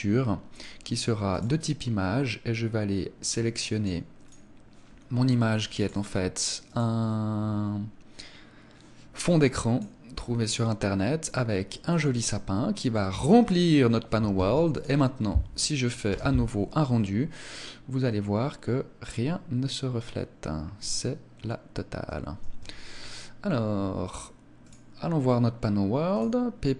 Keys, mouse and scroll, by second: 3.3 click, 4.2 click, 9.8 click, 13.4 scroll up 4, 14.3 ctrl+s, 22.3 Escape, 24.6 click, 25.2 scroll up 1, 26.1 click, 26.1 scroll up 2.